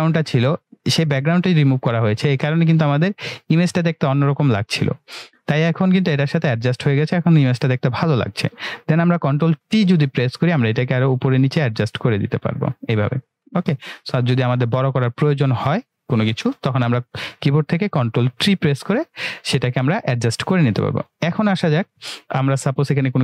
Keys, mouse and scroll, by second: 8.4 click, 9.3 ctrl+t, 10.6-11.2 drag, 17.0 typing.